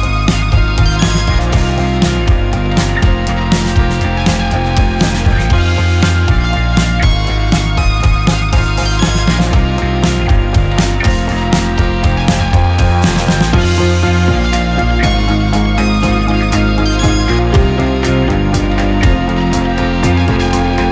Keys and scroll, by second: 0.0 Escape, 3.4 2, 3.9 Return, 10.1 -, 10.5 6, 10.9 Return, 14.6 4, 15.5 Return.